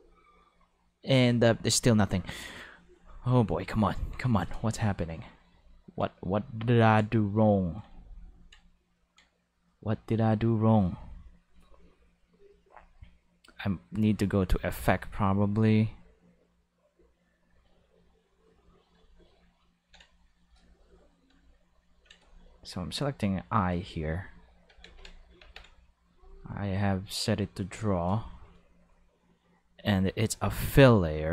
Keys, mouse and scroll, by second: 1.1 5, 2.9 click, 3.5 middle click, 4.2-4.6 middle drag, 5.5 ctrl+middle click, 7.3 ctrl+middle click, 8.6 middle click, 9.0 ctrl+middle click, 12.6 click, 14.6 click, 17.5 click, 21.5 ctrl+middle click, 22.9 click, 24.8 ctrl+5, 25.4 ctrl+Tab, 26.1 click, 29.8 click.